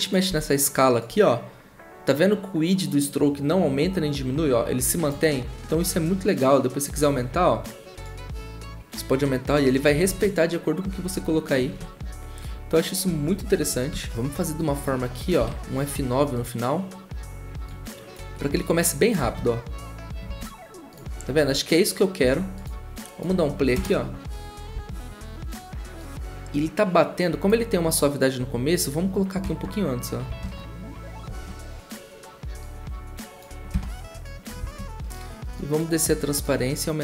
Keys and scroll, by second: 0.3 s, 10.0 ctrl+z, 11.7 ctrl+z, 11.7 ctrl+\, 14.1 ctrl+z, 14.1 ctrl+\, 14.1 0, 14.1 space, 15.4 F9, 23.7 0, 29.4-30.4 typing, 33.7 0.